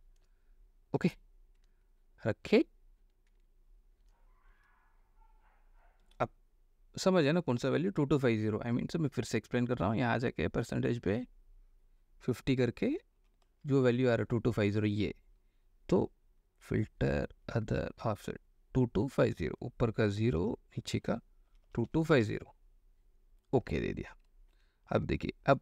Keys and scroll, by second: 6.2 Escape, 8.4 ctrl+alt+i, 13.4 KP_5, 13.6 KP_0, 20.6 0, 21.7 KP_2, 21.8 KP_2, 22.0 KP_5, 22.3 KP_0, 24.8 ctrl+d.